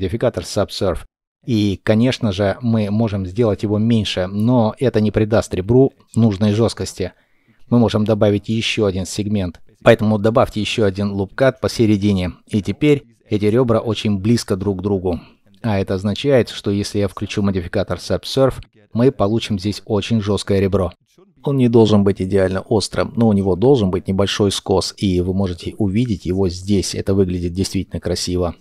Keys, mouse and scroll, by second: 1.6 shift+click, 20.4-22.4 scroll down 1, 23.1 middle click, 27.4 scroll up 1, 28.3 shift+click.